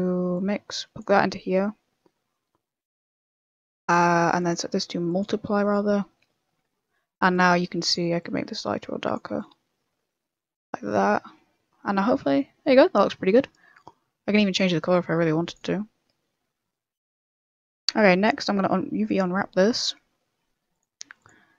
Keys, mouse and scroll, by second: 4.3 click, 6.6 middle click, 7.3 click, 8.1 click, 9.7 click, 10.7 middle click, 12.6 middle click, 12.9-13.3 scroll down 4, 13.2 middle click, 13.7 middle click, 14.1-14.6 scroll up 3, 14.5 click, 16.0 click, 17.7-18.0 scroll up 2, 18.0 Tab, 19.0 click, 19.6 u.